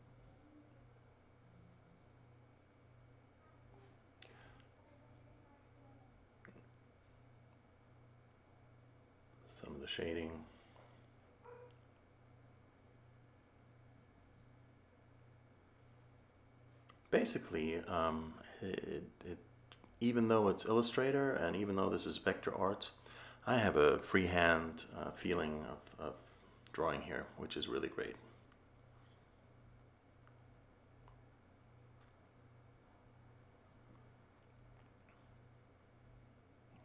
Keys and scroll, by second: 0.6 a, 9.0 a, 15.2 a, 20.2 a.